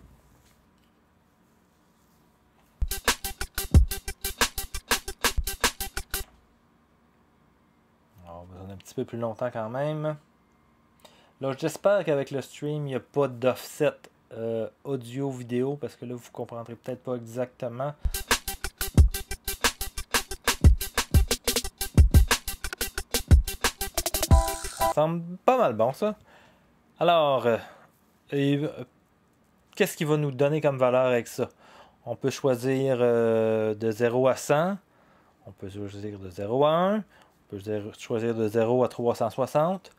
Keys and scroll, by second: 2.6 0, 6.0 0, 6.2 0, 17.7 0, 24.7 0.